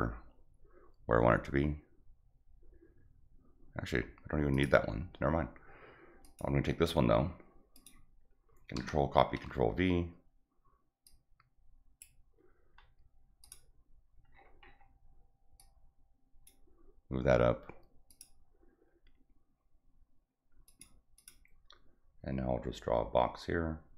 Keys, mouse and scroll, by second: 4.5 click, 6.2 click, 7.7 click, 8.7 ctrl+c, 9.1 ctrl+v, 11.0 click, 13.4 click, 14.6 middle click, 14.7 middle click, 15.5 click, 18.0 click, 20.6 click, 21.1 click.